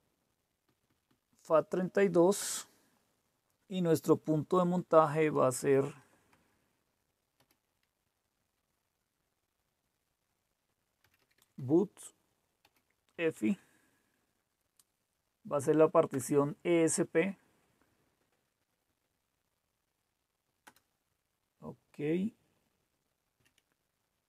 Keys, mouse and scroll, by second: 0.6 Down, 0.8 Down, 2.4 Return, 4.9 /, 6.2 BackSpace, 7.3 -, 9.1 typing, 10.8-13.9 typing, 16.1 Return, 20.7 Return, 23.4 Down.